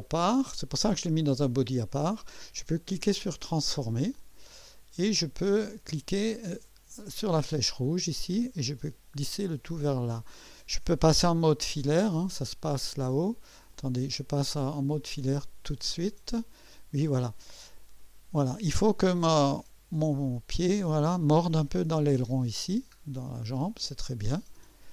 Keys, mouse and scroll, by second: 0.2 right click, 3.5 click, 4.5-4.9 scroll up 1, 5.0-5.8 right drag, 7.2-10.2 drag, 11.6 2, 13.7 click, 14.1 typing, 15.1-15.6 typing, 16.8 scroll up 1, 17.3-17.8 right drag, 18.2 scroll up 1, 23.0-23.5 scroll down 2, 24.8 2.